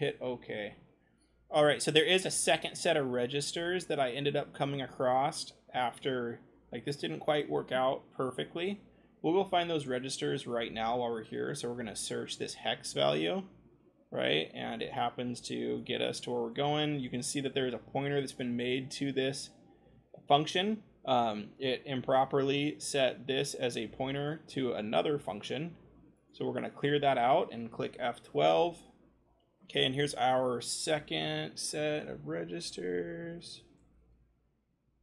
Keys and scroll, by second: 6.9 c, 11.7 ctrl+v, 27.9 F12, 33.3-35.0 typing.